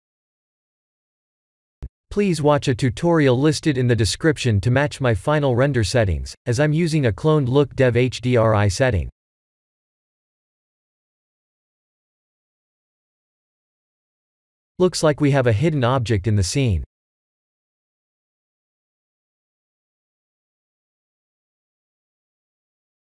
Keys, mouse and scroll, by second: 3.2 ctrl+s, 6.1 click.